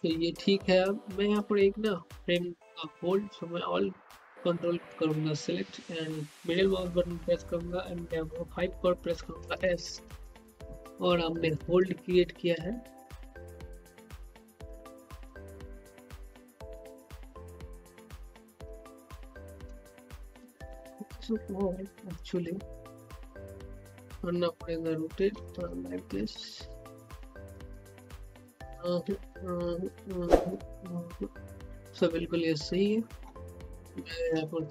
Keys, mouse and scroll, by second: 1.2 click, 4.4 click, 5.5-9.3 middle drag, 9.3-19.4 typing, 20.6-26.1 drag, 26.1-30.9 typing, 32.3-33.6 typing, 34.5-34.7 middle drag.